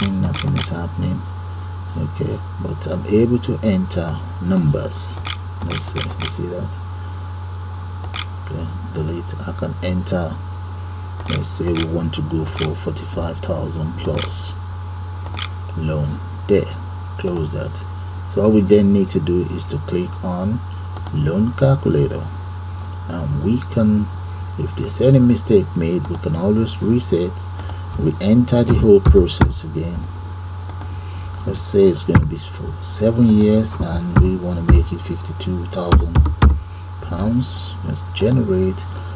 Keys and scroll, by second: 0.0-1.1 typing, 3.8-7.3 typing, 10.5 4, 10.9 5, 11.7 3, 13.3 2, 13.7 3, 14.5 4, 15.3 u, 15.5 End, 15.7 Page_Up.